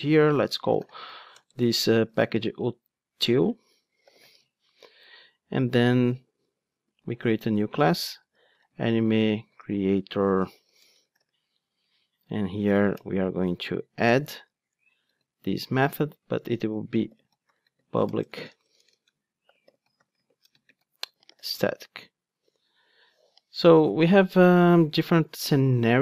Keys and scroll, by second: 7.2 super+n, 14.5 Tab, 15.0 Tab, 15.1 super+v.